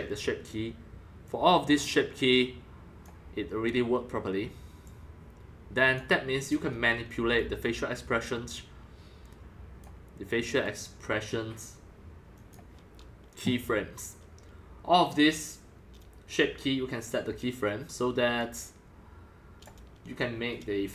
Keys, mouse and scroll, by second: 3.4-5.9 middle drag, 5.9-14.8 drag, 14.8-16.0 scroll down 2, 16.0 scroll, 16.1-17.1 scroll down 3, 17.1-17.6 scroll, 18.3 click, 18.3 scroll, 19.6-19.9 drag.